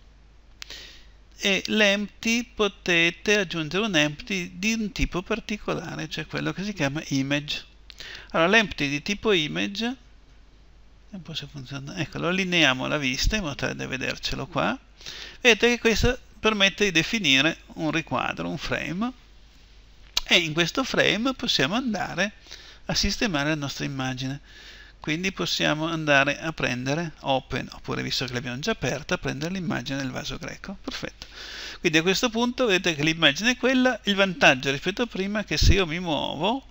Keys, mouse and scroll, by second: 11.3-13.1 drag, 15.0-20.0 middle drag, 21.1-26.7 drag, 32.1-36.7 middle drag.